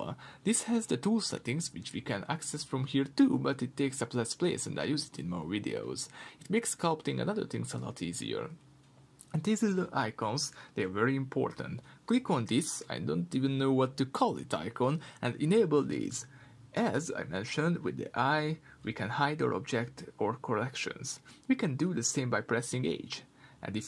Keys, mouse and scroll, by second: 10.3 click, 11.1-19.2 middle drag, 11.8-13.2 scroll up 2, 19.2-20.9 drag, 20.9-22.4 middle drag.